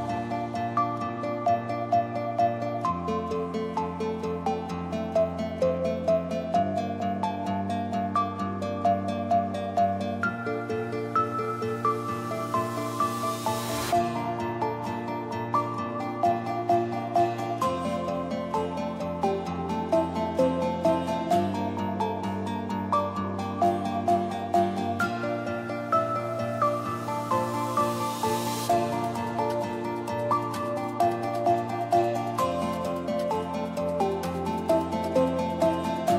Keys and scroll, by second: 0.7-2.0 typing, 4.4 space, 8.2 Down, 14.8-16.2 typing, 17.9-19.1 typing, 25.4 Down, 32.9 Down.